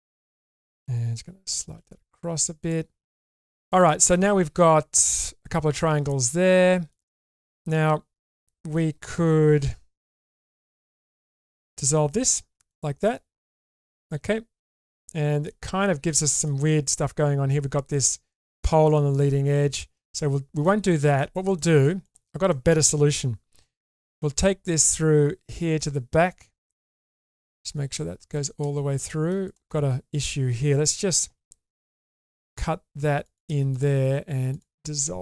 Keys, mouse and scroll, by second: 1.5 g, 4.2 middle click, 6.1 shift+middle click, 9.6 2, 12.2 ctrl+x, 12.7-15.5 middle drag, 16.1 middle click, 17.9 middle click, 18.9 middle click, 19.7 ctrl+z, 20.6 middle click, 21.1 click, 21.5 middle click, 22.5 middle click, 23.6 k, 26.7-28.7 middle drag, 29.1 middle click, 31.3 k, 33.7 click, 34.5 alt+click.